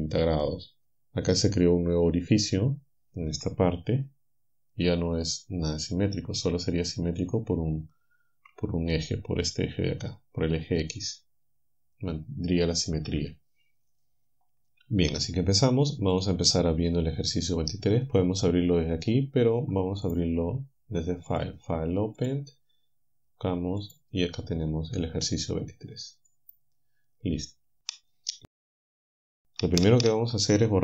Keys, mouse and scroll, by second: 16.2 alt+click, 20.1 click, 21.4 click, 22.2 click, 23.8 click, 26.3 click, 28.7 7.